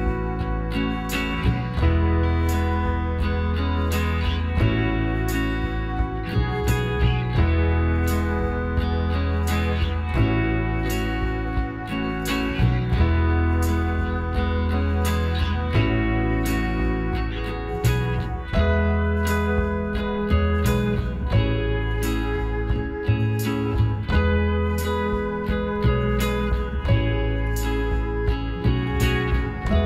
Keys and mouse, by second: 0.7-2.0 middle drag, 2.0-3.8 drag, 3.0-5.8 right drag, 5.8-7.0 middle drag, 6.7 click, 7.1 s, 12.1-14.5 drag, 13.1-15.4 middle drag, 14.5-15.5 right drag, 14.5 w, 17.9-19.7 drag, 20.0-21.8 drag, 20.9-22.5 right drag, 22.1 h, 23.4 ctrl+z, 25.8 k.